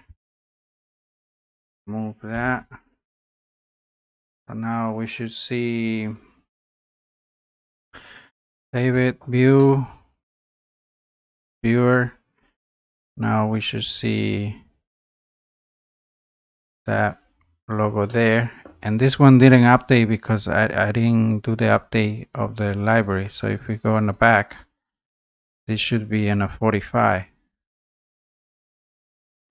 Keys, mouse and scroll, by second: 0.2 typing, 1.8-3.8 typing, 3.8 click, 6.1 click, 7.4-7.8 typing, 8.5 click, 9.3 click, 10.3 click, 13.3 click, 14.3 click, 15.2 middle click, 15.4 middle click, 15.6 scroll up 6, 16.5 middle click, 16.8-17.2 scroll up 3, 17.2 scroll down 4, 17.9 scroll up 1, 18.6 middle click, 20.0 scroll down 1, 20.1-20.4 scroll up 4, 20.6 scroll down 2, 23.6 click, 23.9 click, 24.1 click, 24.3 click, 24.5 click, 24.8 click, 24.9 click, 25.2 click, 25.4 click, 25.7 click, 27.2 click, 28.3 click, 29.2 click.